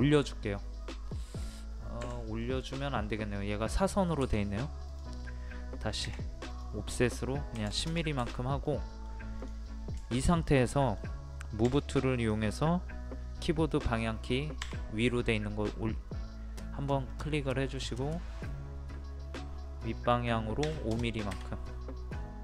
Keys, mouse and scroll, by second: 1.1-2.0 scroll down 1, 2.0 Escape, 2.4 middle click, 2.7-4.2 scroll down 1, 4.4-4.9 scroll up 1, 4.9 click, 6.0 o, 6.5 click, 7.5 KP_1, 8.6 middle click, 9.4 click, 10.7 middle click, 12.1 click, 14.6 Up, 17.1 middle click, 20.6 KP_5, 21.6 middle click, 22.1-22.4 scroll down 1.